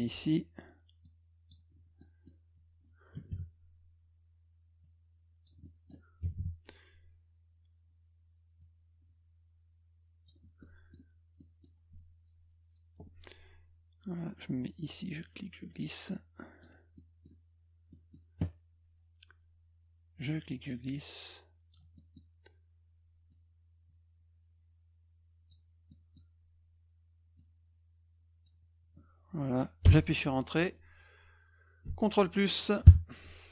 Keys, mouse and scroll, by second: 1.1 click, 2.0 middle click, 4.8 click, 5.6 middle click, 8.6-10.3 drag, 10.6 middle click, 11.4 middle click, 15.7 click, 17.0 middle click, 17.9 middle click, 20.2-21.7 drag, 22.0 middle click, 23.3-25.5 drag, 25.9 middle click, 27.4-28.5 drag, 29.9 Return.